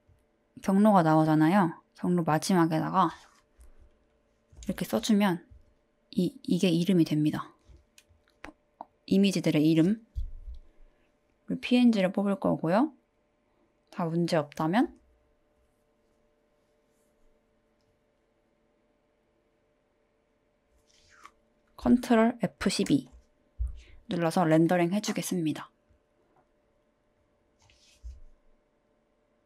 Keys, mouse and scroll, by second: 0.8-7.4 drag, 11.9-12.7 drag, 23.1 ctrl+F12.